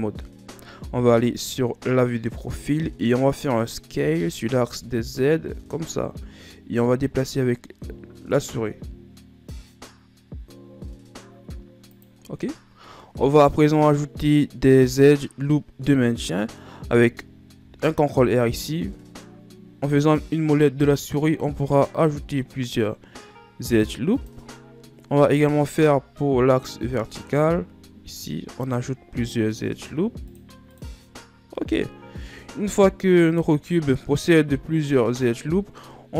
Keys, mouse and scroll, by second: 0.1 Tab, 1.9 KP_3, 4.6 s, 12.9 scroll down 2, 13.0-16.2 middle drag, 16.9-18.3 middle drag, 18.3 ctrl+r, 25.4-26.3 scroll up 2, 26.3 ctrl+r, 32.8 Tab, 33.3-33.7 scroll down 1, 33.7-36.1 middle drag.